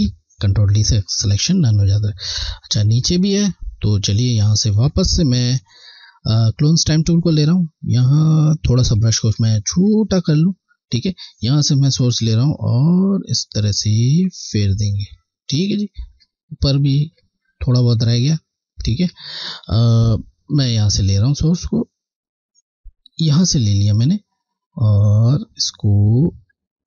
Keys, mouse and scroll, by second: 1.8 scroll, 3.9 click, 4.2 space, 5.7 click, 7.9 click, 9.2 [, 11.2 typing, 11.9 alt+Left, 15.6-16.1 scroll, 16.4 scroll up 1, 16.5 scroll, 16.6 alt+scroll down 2, 17.9-18.4 scroll, 18.4 alt+scroll up 1, 18.7 scroll, 19.7 space, 19.8 click, 20.2 space, 23.4 alt+click, 24.2 click.